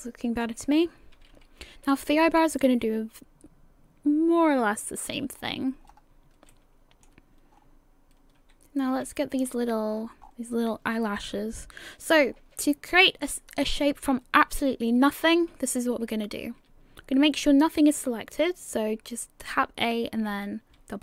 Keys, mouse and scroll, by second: 0.4 scroll up 4, 1.2 a, 1.8 a, 5.3-6.4 scroll up 8, 6.5 shift+middle click, 7.5-8.3 scroll down 9, 8.9 a, 9.0 a, 9.4-11.1 scroll up 9, 11.1 scroll down 1, 11.3-12.3 scroll down 1, 12.3 scroll down 5, 13.0 scroll down 5, 13.0 scroll up 1, 13.1 scroll down 1, 15.5 a, 19.3 a.